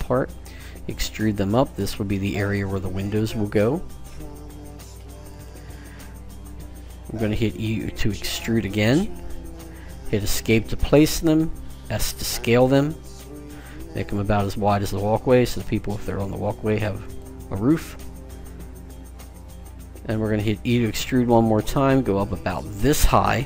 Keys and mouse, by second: 0.7 e, 8.9 e, 11.7 s, 20.6 e.